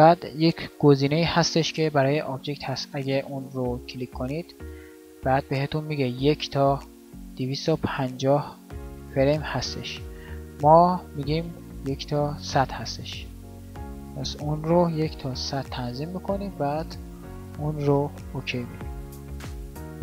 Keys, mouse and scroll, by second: 15.1 KP_0.